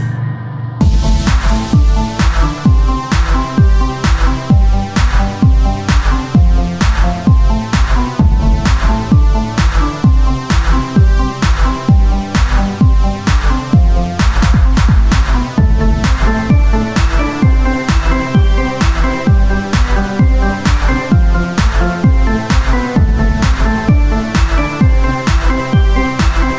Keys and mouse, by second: 0.0-1.4 typing, 2.4 z, 3.6 click, 4.5 g, 5.5-6.7 drag, 6.7 g, 7.9 ctrl+Tab, 8.6 click, 9.3 z, 9.7 z, 10.7 ctrl+r, 11.2 ctrl+Tab, 12.5 click, 15.3 ctrl+Tab, 18.6 e, 20.0 Tab, 23.4 Tab, 25.4 ctrl+b.